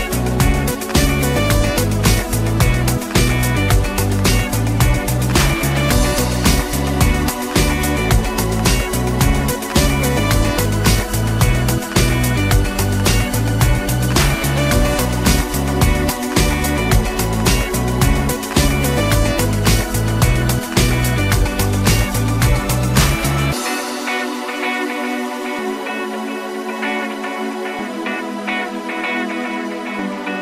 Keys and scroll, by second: 3.1 Return, 5.3 Return, 8.3 Escape, 12.5 Escape, 15.7 Escape.